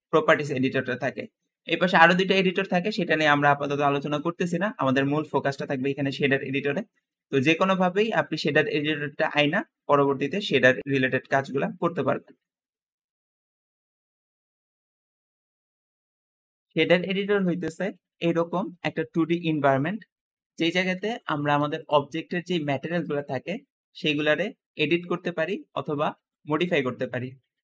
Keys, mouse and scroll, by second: 16.2-17.1 scroll down 2, 16.7 middle click, 17.2-18.0 scroll up 3, 17.6 middle click, 18.1-19.8 middle drag, 18.1-18.7 scroll down 2, 21.3 g.